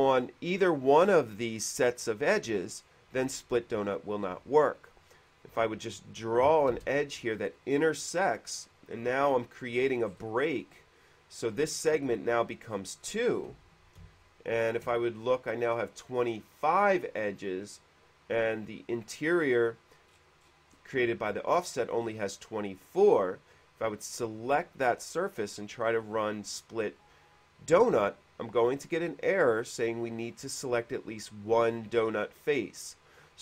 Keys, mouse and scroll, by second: 2.6 middle click, 4.1 middle click, 4.6 q, 5.5 click, 6.7 click, 6.9 space, 8.8 click, 10.0 middle click, 10.0 scroll up 1, 10.1 middle click, 10.3 middle click, 12.9 middle click, 19.4 click, 20.3-21.3 middle drag, 23.2 click, 29.0 click, 32.1 click.